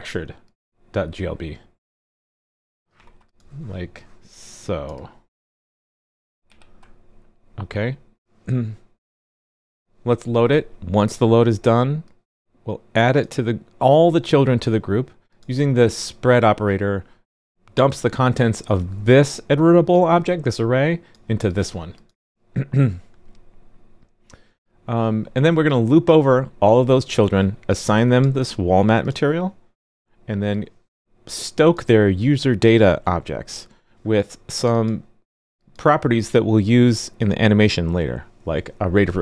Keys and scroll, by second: 2.9 super+c, 6.1 super+v.